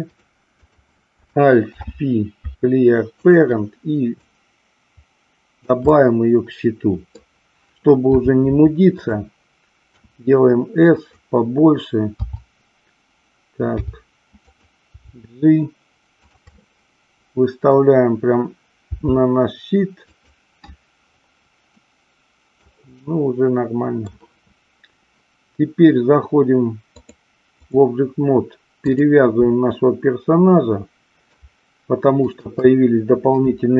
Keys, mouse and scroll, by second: 0.1 click, 1.7 alt+p, 4.2-5.7 drag, 5.8 scroll up 1, 5.9-7.2 middle drag, 8.1 r, 9.1 click, 10.8 click, 14.9 g, 16.2 click, 16.5-17.8 middle drag, 18.9 g, 20.1 click, 21.7-22.7 middle drag, 23.0 scroll up 1, 23.1-24.1 middle drag, 26.8-27.8 drag, 28.7 click, 32.2 shift+click.